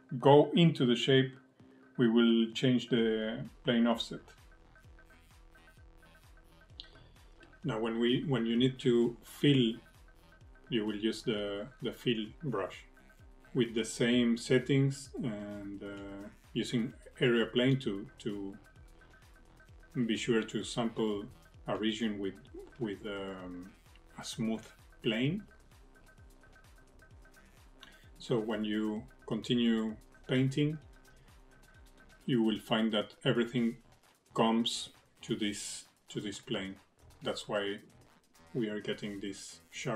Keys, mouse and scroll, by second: 0.4 middle click, 3.3 click, 13.5 click, 17.9 click, 20.5 click, 21.6 click, 33.6 f, 37.4 click.